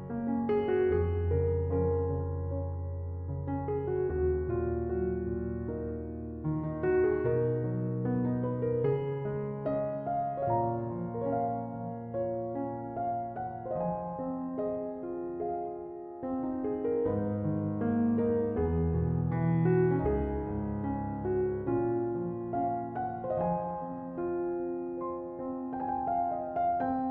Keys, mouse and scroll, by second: 4.1-10.0 drag, 10.0-11.1 middle drag, 11.1 Tab, 11.4-14.4 middle drag, 15.0 Tab, 16.4-20.3 drag, 20.9-24.1 drag, 24.1-26.3 scroll down 2, 26.3 click, 26.8 click.